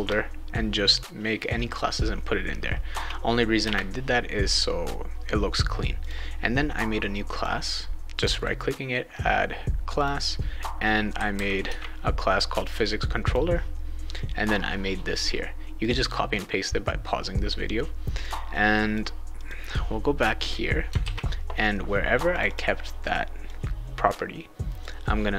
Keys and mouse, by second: 3.6 Return, 6.0 click, 7.3 click, 8.1 click, 8.4 right click, 10.0 click, 10.9-12.1 typing, 13.2 click, 18.2 click, 19.4 click, 21.0 ctrl+s, 22.3 click, 22.5 click, 23.5-24.8 drag.